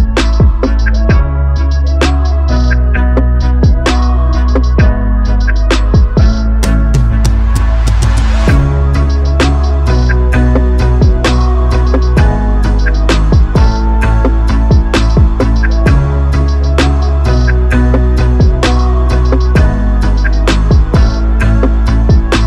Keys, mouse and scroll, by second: 4.2-6.6 drag, 7.3-8.7 drag, 10.9-14.9 drag, 19.3-21.2 drag.